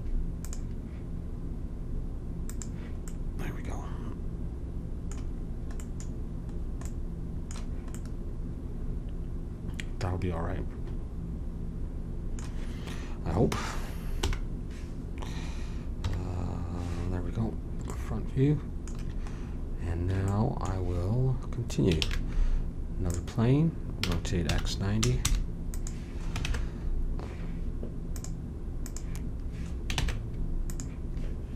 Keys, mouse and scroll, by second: 3.2 click, 14.2 h, 16.0 KP_1, 22.0 shift+a, 24.0 r, 26.4 ctrl+Tab, 28.9 click, 29.9 ctrl+Tab.